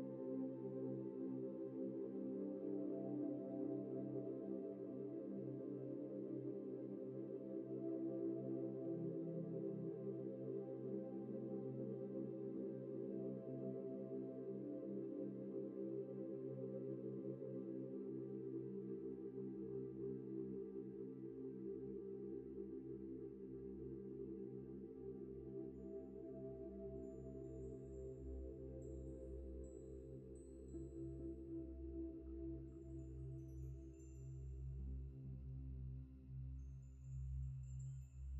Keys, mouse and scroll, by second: 1.0 Return, 1.0 v, 2.7 ctrl+j, 6.1 ctrl+-, 6.6 ctrl+space, 6.6 ctrl+click, 6.8 ctrl+space, 7.8 ctrl+-, 8.6 typing, 12.2 BackSpace, 13.2 ctrl+d, 15.2 ctrl+e, 16.7 ctrl+e, 17.3 double click, 18.2 ctrl+t, 19.2 Left, 19.6 Left, 20.4 Left, 20.5 Left, 21.5 ctrl+-, 22.3 ctrl+space, 22.4 ctrl+click, 22.6 ctrl+space, 22.7 ctrl+click, 25.7 Right, 25.9 Right, 26.4 Left, 26.6 Left, 27.2 Right, 27.3 Right, 29.8 Left, 29.9 Left, 30.5 Right, 31.5 Left, 31.6 Left, 31.8 Left, 32.0 Left, 35.4 Return, 36.8 double click.